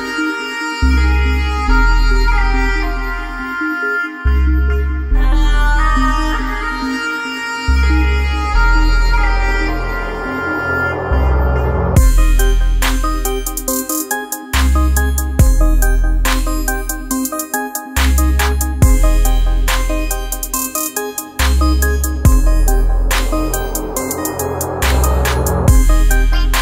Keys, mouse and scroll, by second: 0.5-7.6 alt+drag, 0.8 typing, 7.6-9.9 drag, 12.4-12.7 typing, 12.7 click, 17.2 click, 20.4 typing, 21.0 click.